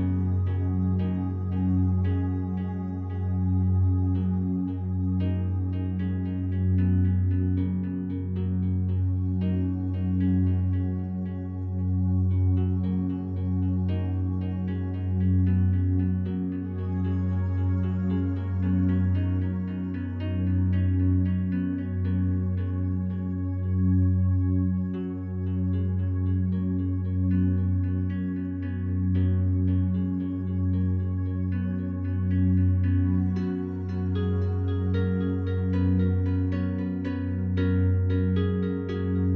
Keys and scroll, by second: 12.6 Delete, 31.0 Delete.